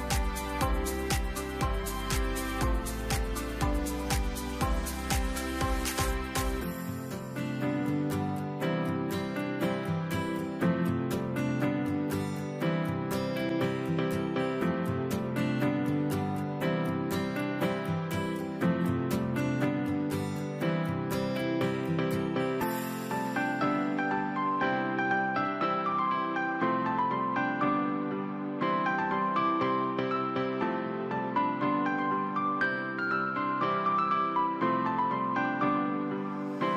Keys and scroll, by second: 1.9 v, 8.3 Left, 9.1 ctrl+3, 12.8 Return, 13.9 ctrl+a, 18.6 Right, 19.0-21.6 typing, 23.9-24.9 typing, 24.2 Return, 28.4 shift+Right, 28.5 shift+Right.